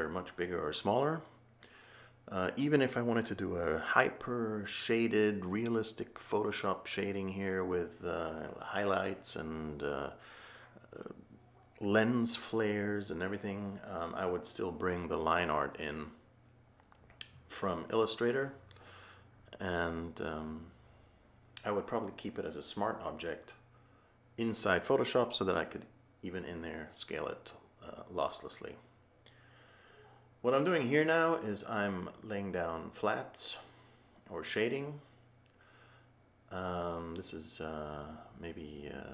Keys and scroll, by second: 1.8 h, 10.1 a.